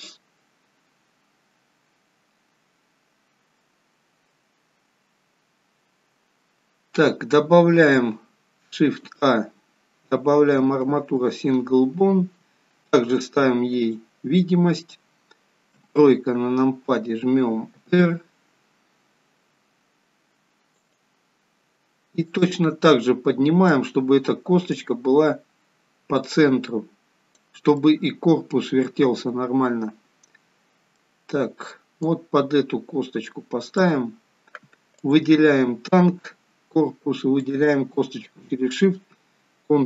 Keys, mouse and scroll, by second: 9.1 shift+a, 13.9 click, 16.0 KP_3, 17.8 r, 22.4 click, 24.8 click, 27.9 middle click, 32.1 click, 35.1 click, 37.5 shift+click.